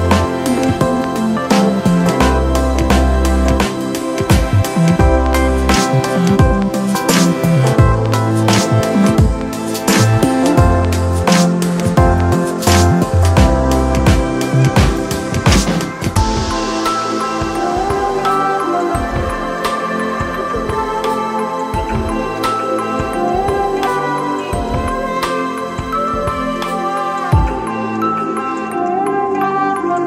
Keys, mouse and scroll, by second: 0.5-0.9 scroll up 1, 5.0 ctrl+=, 23.2 ctrl+t, 24.4 ctrl+0, 25.9 alt+shift+click, 29.9 alt+shift+click.